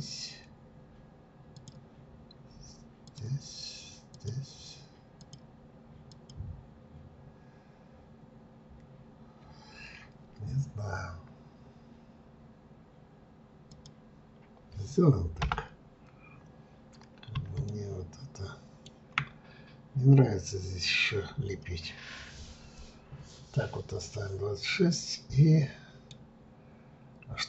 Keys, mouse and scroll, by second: 16.1-16.7 scroll down 2, 16.7-17.7 scroll up 2, 17.7-20.7 shift+middle drag, 23.8-24.7 scroll down 2, 24.7-27.4 middle drag.